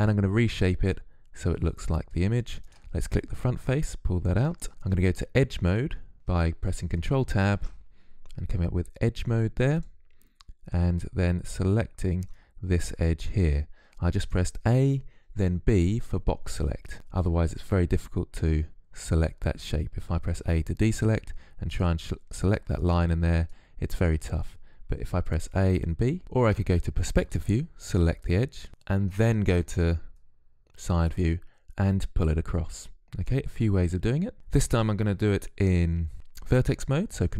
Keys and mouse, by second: 1.5-2.5 drag, 2.5 middle click, 3.3-6.5 drag, 6.5 ctrl+Tab, 10.7 a, 11.1 b, 19.2 a, 20.6-22.5 drag, 24.3 a, 24.7 b, 26.2 KP_3, 28.7 KP_3, 36.4 ctrl+Tab.